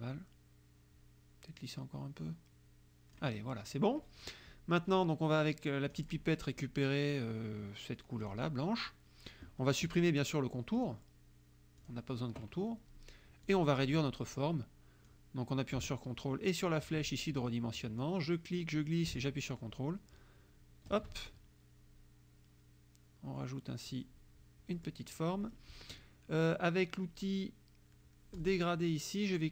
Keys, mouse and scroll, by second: 6.0 click, 8.3 click, 10.8 click, 11.8 click, 13.5 click, 15.1-17.1 drag, 18.0-21.1 drag, 21.3-24.1 ctrl+drag, 24.8 click, 28.4 click.